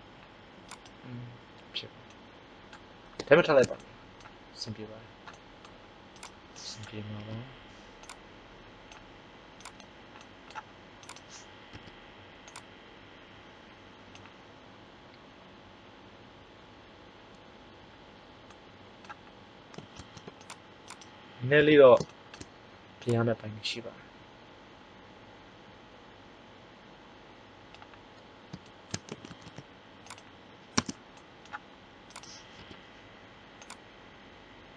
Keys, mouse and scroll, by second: 0.7-2.7 middle drag, 6.2-7.9 right drag, 7.1 KP_1, 8.0 click, 9.6 click, 9.6 right click, 11.7 KP_1, 18.4-19.5 middle drag, 20.0 ctrl+Tab, 21.6 KP_1, 22.0 middle click, 22.9 click, 29.2 ctrl+Tab, 32.0-33.9 drag, 32.6 KP_1, 33.6 right click.